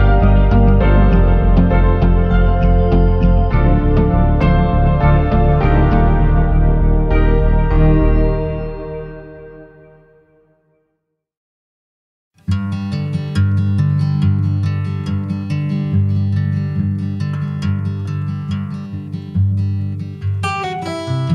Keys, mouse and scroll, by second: 1.3 ctrl+r, 2.8 click, 5.3 s, 6.2 y, 8.4 click, 9.1 middle click, 10.3 click, 11.8 ctrl+shift+click, 14.5 alt+shift+click, 15.3 alt+shift+click, 19.2 4.